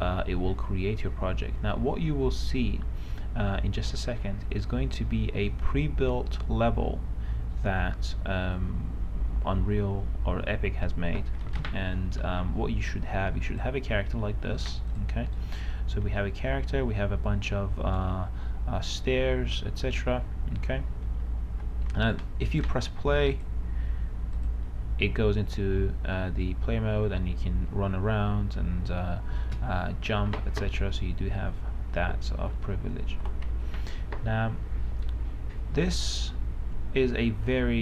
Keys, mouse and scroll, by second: 12.5 right click, 13.9 click, 14.9 right click, 15.3 click, 15.7 right click, 16.3 d, 16.5 d, 19.1 d, 20.0-21.4 right drag, 21.2-22.1 typing, 22.6 click, 26.7-27.5 w, 32.4-33.5 typing, 33.8 Escape, 35.4 d, 36.0 s, 37.5-37.8 a.